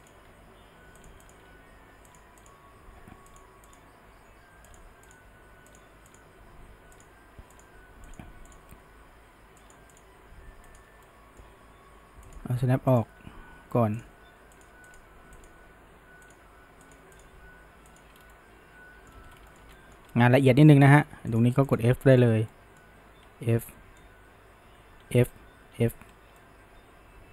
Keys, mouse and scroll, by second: 0.0 click, 0.3 g, 1.3 click, 1.5 g, 2.4 click, 2.7 g, 3.7 click, 4.1 g, 5.1 click, 5.3 g, 6.1 click, 6.5 g, 7.6 click, 7.8 g, 8.5 click, 8.7 g, 10.0 click, 10.2 g, 11.1-12.3 middle drag, 12.3 click, 12.9 click, 13.2 g, 14.6 click, 14.9 click, 15.1 g, 16.3 click, 16.5 g, 17.2 click, 17.4 g, 18.2 scroll, 18.3-19.3 middle drag, 19.3 scroll, 19.5-20.1 shift+middle drag, 20.1-20.6 scroll, 20.6-20.9 middle drag, 20.9-21.3 scroll, 21.3 click, 21.7 shift+click, 22.0-23.3 middle drag, 23.3 f, 23.7-25.1 middle drag, 25.1 f, 25.7 f, 26.1 scroll down 1, 26.4-27.3 middle drag.